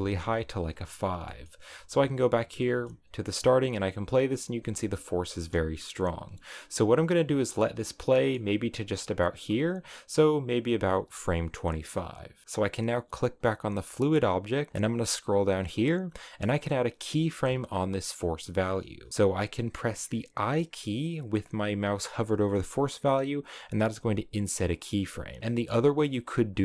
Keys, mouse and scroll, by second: 0.8 click, 1.2 middle click, 1.4-1.9 scroll down 3, 1.9 space, 2.3 scroll down 3, 2.6-4.5 middle drag, 4.5 space, 5.1 scroll up 3, 5.3 space, 6.7 space, 7.6-10.8 middle drag, 10.8-12.4 drag, 13.3 right click, 14.7-19.1 drag, 24.0 i.